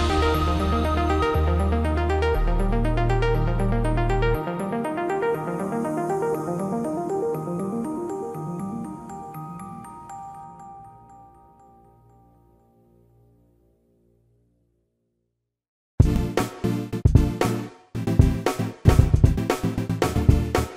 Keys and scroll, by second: 3.7 p, 7.1 shift+space, 8.9 f, 13.8-15.0 typing, 14.4 Return, 17.9 p.